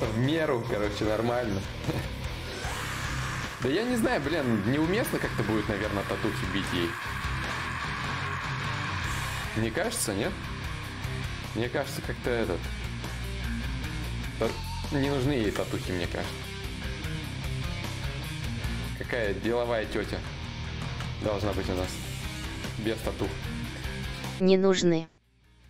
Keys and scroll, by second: 16.2-17.8 typing, 19.6 x, 22.5 d.